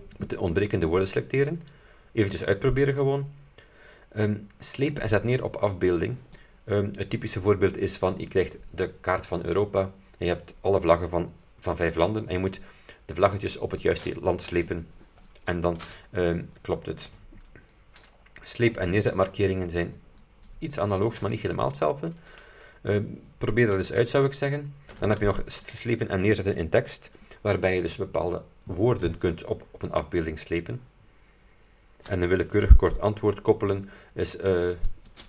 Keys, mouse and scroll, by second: 2.3-2.6 scroll down 2, 4.9 click, 18.8 click, 25.7 click, 32.8 click.